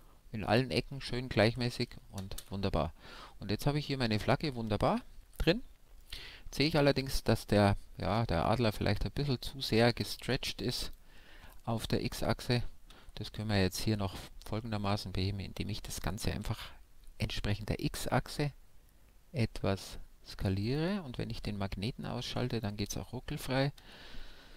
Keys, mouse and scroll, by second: 0.4 Tab, 0.7-2.7 middle drag, 2.4 KP_5, 3.1-8.0 middle drag, 8.0-10.0 scroll down 1, 10.0 Tab, 10.6-11.2 scroll down 1, 11.2-12.8 middle drag, 11.7 a, 12.8-13.5 scroll up 1, 13.5 s, 17.8-19.6 right drag, 19.6-21.2 drag, 20.8 s.